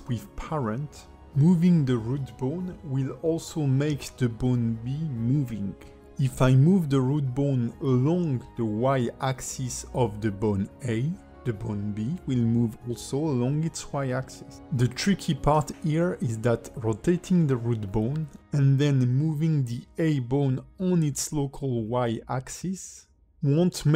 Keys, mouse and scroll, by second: 0.8 click, 4.0 click, 4.6 click, 5.2 g, 8.9 click, 9.6 g, 12.3 alt+middle click, 13.0 g, 15.9 alt+middle click, 18.8 click, 19.3 alt+middle click, 20.0 click, 21.0 g, 23.4 click, 23.7 alt+middle click.